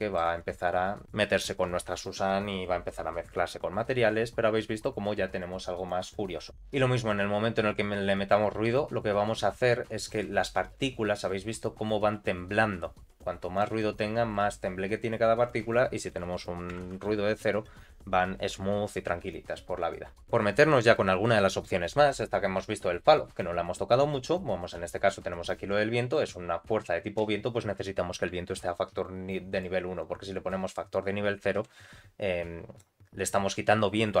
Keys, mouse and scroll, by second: 4.7 click, 6.4-7.0 scroll down 2, 7.0-8.7 drag, 9.1 scroll up 1, 10.1-11.1 scroll up 1, 13.6-19.6 drag, 13.6-14.2 scroll up 2, 24.8-26.1 drag, 29.0 click, 30.0 click, 31.5 shift+Left, 32.8 scroll up 2, 33.3 scroll down 1.